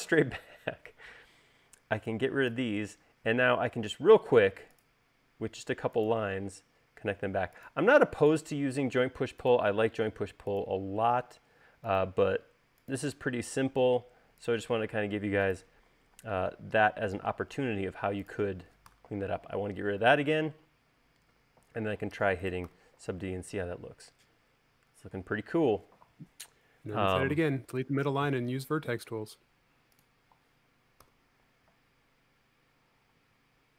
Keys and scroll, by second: 1.4 e, 4.0 l, 6.8 l, 16.7 space, 19.4 BackSpace, 23.1 u, 31.5 u, 33.6 e.